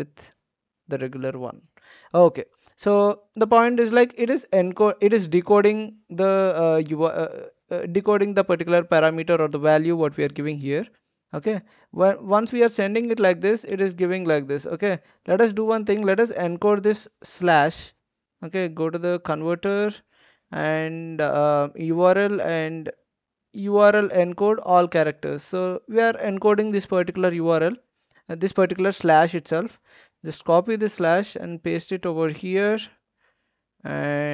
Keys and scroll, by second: 0.2 ctrl+v, 30.2 ctrl+c, 32.6 BackSpace, 32.9 ctrl+v.